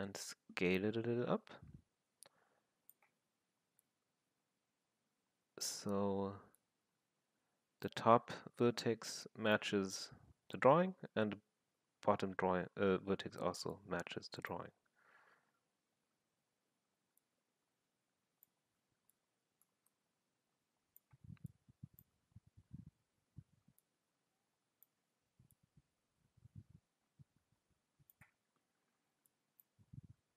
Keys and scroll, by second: 3.1 w, 5.8 r, 16.1 w, 18.6 r, 22.5 w, 24.9 r.